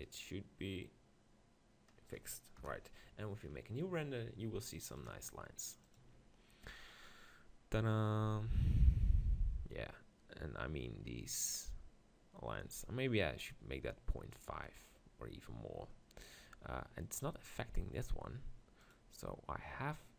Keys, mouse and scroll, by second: 2.6 KP_0, 3.4 middle click, 6.2 click.